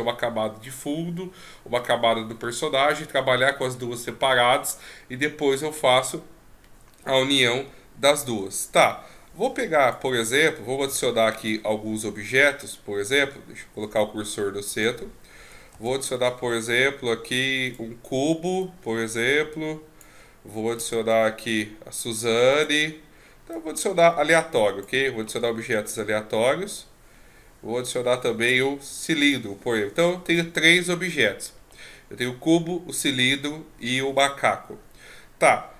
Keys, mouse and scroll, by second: 8.2 click, 10.9 x, 13.2 shift+s, 15.7 shift+a, 18.6 click, 20.8 shift+a, 23.5 click, 25.2 shift+a.